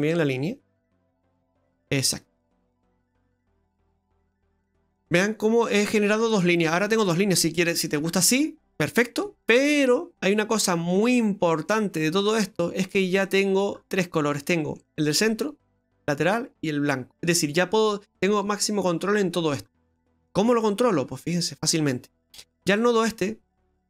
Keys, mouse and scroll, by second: 0.3 click, 4.5-6.0 scroll down 12, 4.8 middle click, 8.1-9.5 scroll up 4, 9.5-10.5 scroll down 5, 10.5-11.2 scroll down 5, 11.5 middle click, 13.5-14.5 scroll up 11, 14.5 middle click, 14.7 middle click, 19.7-20.6 scroll down 11, 20.6 middle click.